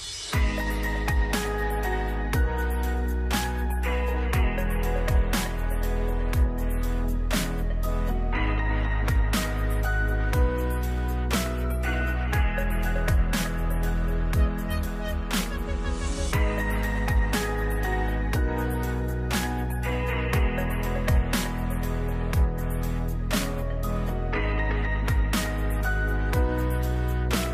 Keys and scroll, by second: 2.2-5.5 typing, 21.8 shift+Up, 26.1 ctrl+s, 26.9 ctrl+d, 27.2 shift+Down.